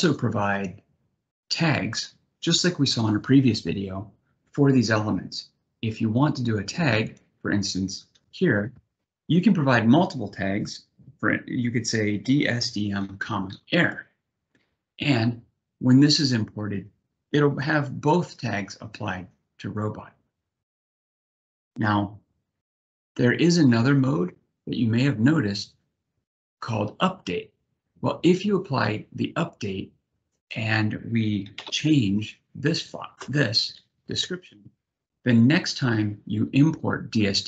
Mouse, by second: 6.8 click, 30.0 click.